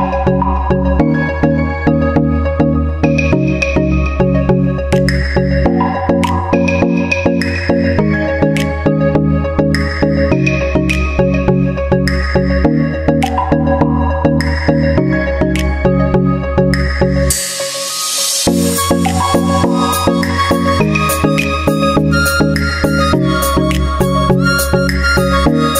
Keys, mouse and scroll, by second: 1.3 s, 2.4-3.4 drag, 2.9 z, 3.1 z, 3.7-5.0 drag, 4.0 s, 5.5-8.1 drag, 5.8-8.1 middle drag, 9.8 s, 10.7-11.7 drag, 10.8 s, 12.8-15.5 drag, 15.2 ctrl+z, 15.9 ctrl+z, 16.2-17.8 drag, 19.2-20.2 drag, 20.2-21.7 middle drag, 21.7-23.4 drag, 23.5 click, 23.9 middle click, 24.4-25.7 middle drag, 24.7-25.7 drag.